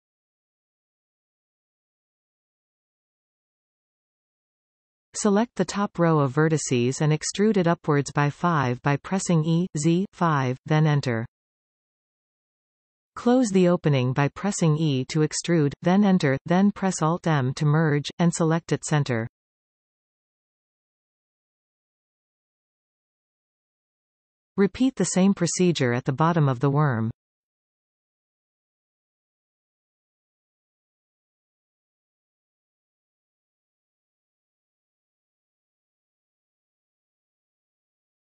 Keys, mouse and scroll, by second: 0.5 f, 4.7 alt+a, 6.0 alt+shift+click, 7.1 ctrl+z, 7.7 alt+shift+click, 8.1-8.9 scroll down 2, 8.9 scroll down 1, 9.0 e, 10.2 Return, 10.8-11.4 scroll down 2, 11.4-14.4 middle drag, 14.4 e, 15.7 Return, 17.0 alt+m, 19.0-26.6 middle drag, 21.2 alt+a, 21.5-22.8 scroll down 2, 22.8-23.2 scroll down 1, 24.7-25.2 scroll up 2, 25.8-26.3 scroll up 2, 26.3 scroll up 1, 26.6 alt+shift+click, 27.6 alt+shift+click, 28.4 ctrl+z, 28.8 alt+shift+click, 30.1 middle click, 30.6-31.4 scroll up 2, 31.4 shift+click, 31.9 shift+click, 32.5 shift+click, 33.3 shift+click, 34.3 shift+click, 35.9 ctrl+z, 37.1 shift+click.